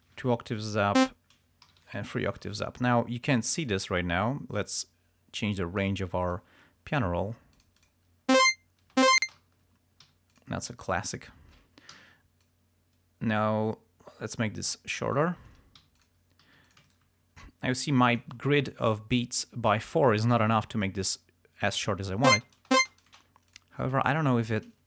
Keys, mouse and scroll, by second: 1.1 click, 1.7 alt+shift+Up, 3.8-6.1 drag, 6.4 click, 7.7 click, 8.5 space, 9.5 ctrl+scroll down 2, 10.2 ctrl+g, 10.4 ctrl+click, 11.2 ctrl+scroll up 2, 12.1 ctrl+t, 12.5-15.1 ctrl+drag, 15.9 g, 16.1 click, 16.5 s, 16.8 shift+click, 16.9 shift+right click, 18.2 click, 21.2 click, 21.9 ctrl+scroll up 2, 22.5 ctrl+space, 23.6 click.